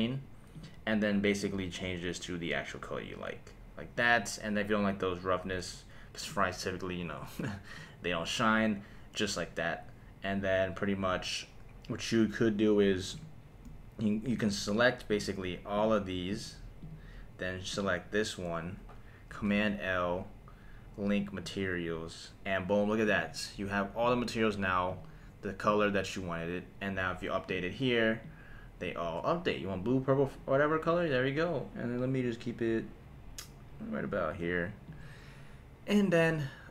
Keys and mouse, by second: 0.5 click, 6.3-7.9 drag, 13.1 click, 14.3 shift+click, 15.1 shift+click, 15.7 shift+click, 16.3 shift+click, 16.8 shift+click, 17.7 shift+click, 19.4 super+l, 23.0 click, 24.0 click, 24.9 click, 25.6 click, 27.4 click, 34.8 click.